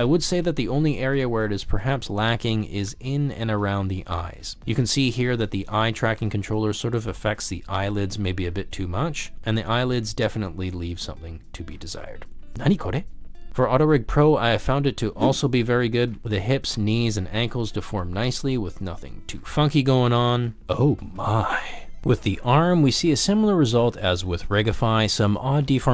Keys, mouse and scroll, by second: 0.0 ctrl+z, 0.3 drag, 0.8 g, 1.2 click, 1.9 g, 2.8 drag, 3.3 ctrl+z, 4.1 middle drag, 4.9 middle click, 5.1 g, 5.4 middle click, 5.6 g, 9.4 ctrl+z, 10.0 g, 10.3 drag, 11.0 g, 11.6 click, 11.8 shift+middle drag, 12.4 click, 13.6 g, 15.9 click, 16.2 ctrl+z, 16.3 g, 17.9 r, 18.5 click, 18.8 r, 19.6 click, 19.9-20.7 middle drag, 20.7 ctrl+drag, 21.1-21.8 shift+middle drag, 22.6 middle click, 22.8 g, 22.9 z, 23.2 middle drag, 23.4 g, 23.6 click, 23.8 r, 24.5 middle drag, 24.9 middle drag, 25.7 middle click.